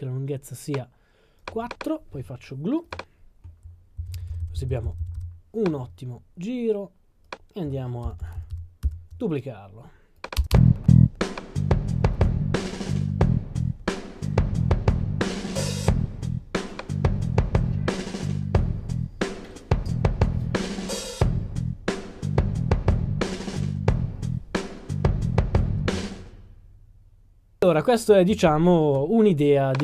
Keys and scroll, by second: 8.0 super+d.